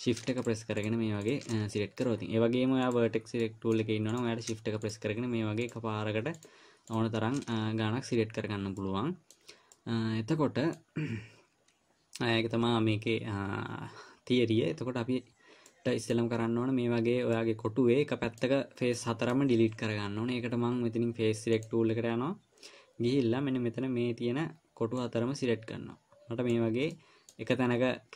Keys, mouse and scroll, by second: 0.8 shift+click, 1.2 shift+click, 2.1 middle click, 3.2 click, 3.9 middle click, 4.5 click, 5.2 shift+click, 9.2 middle click, 10.1 middle click, 16.0 middle click, 17.8 middle click, 22.0 click, 25.4 click, 27.3 middle click.